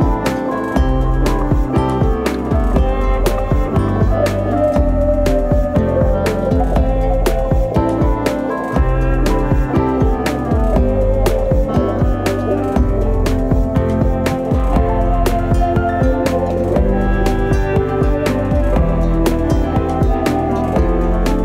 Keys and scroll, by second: 2.5 ctrl+c, 8.8 ctrl+v, 16.4 space.